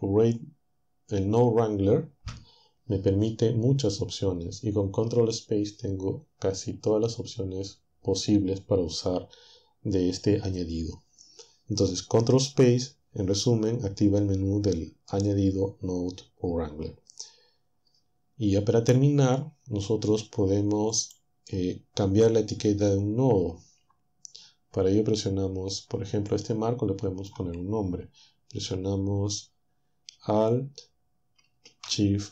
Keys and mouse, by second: 21.0-27.5 drag.